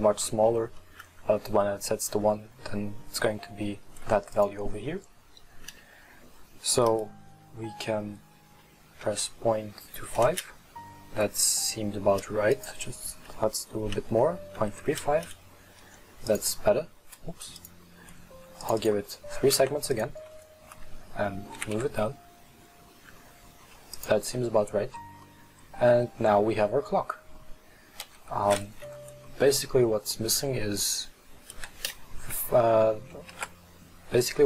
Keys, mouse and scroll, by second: 0.8-4.0 middle drag, 4.5-7.5 drag, 12.6-16.9 drag, 17.7 click, 18.7 click, 19.6 w, 21.6 g, 24.4 middle click, 24.9-25.3 scroll down 3, 25.3-28.1 middle drag, 28.1 KP_1, 29.5-31.6 middle drag, 31.6 KP_1, 33.4 shift+s.